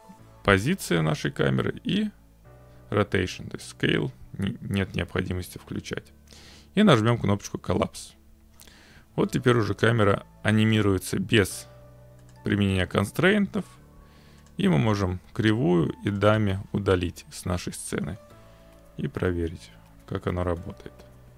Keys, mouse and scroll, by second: 7.9 click, 12.3 click, 13.7 click, 14.5 click, 14.9 Delete, 16.2 click, 16.3 Delete.